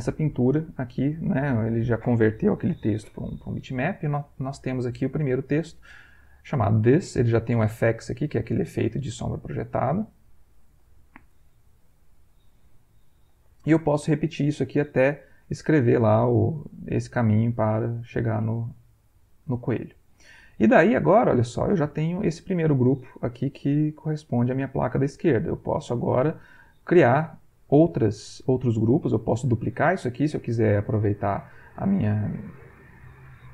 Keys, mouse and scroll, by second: 0.2 click, 0.7 ctrl+click, 1.4 ctrl+click, 7.7 click, 8.2 click, 8.6 click, 8.9 click, 9.7 click, 10.5 click, 11.8 Escape, 15.9 click, 17.9 click, 18.6-20.3 middle drag, 21.1 click, 22.4 click, 23.4 middle click, 25.5 click.